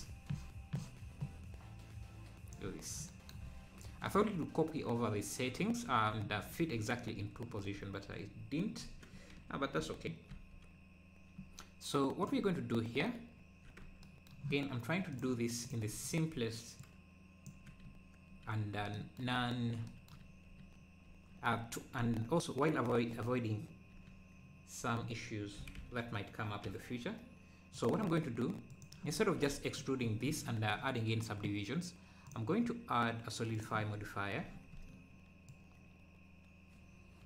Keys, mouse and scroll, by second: 3.4 scroll up 1, 7.6 scroll up 1, 9.8 g, 11.8 g, 13.9 Tab, 15.2-16.8 drag, 23.2 scroll up 1, 25.6 g, 28.7 click, 29.5 Tab, 32.3-33.9 drag, 33.9 `, 35.5-37.2 shift+drag.